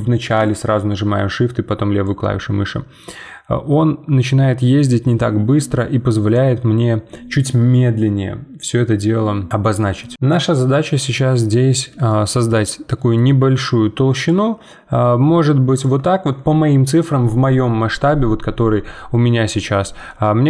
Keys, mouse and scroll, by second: 10.1-11.7 middle drag, 11.7-12.1 scroll up 2, 12.1-14.2 shift+middle drag, 14.2-18.9 shift+drag, 18.9 middle click, 19.7-20.1 scroll down 1, 20.1-20.4 middle drag.